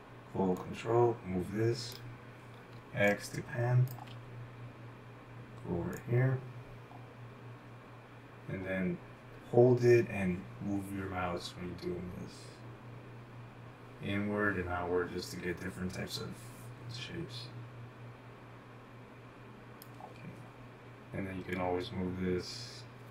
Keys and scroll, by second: 3.2-5.1 typing.